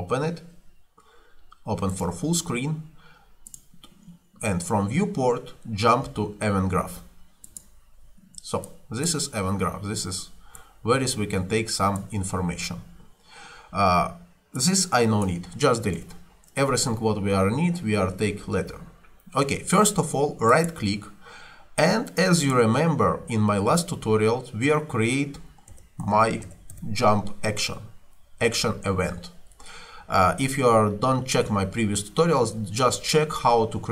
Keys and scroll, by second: 16.0 Delete, 25.5-27.3 typing.